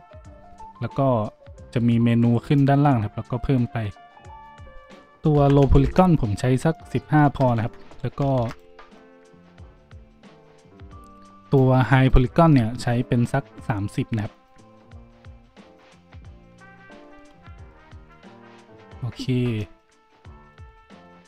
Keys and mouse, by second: 7.2 Tab, 7.6 `, 8.3 shift+d, 12.3 Tab, 16.9 Tab, 17.3 a.